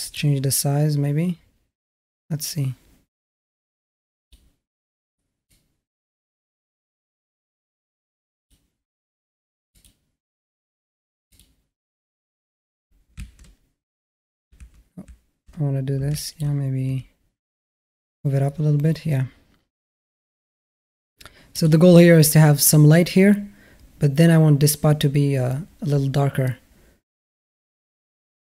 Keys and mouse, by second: 0.0-4.1 drag, 5.3-8.3 drag, 11.1 click, 13.2 alt+q, 14.4 alt+q, 14.9 alt+q, 16.0 alt+shift+middle drag, 16.7 g.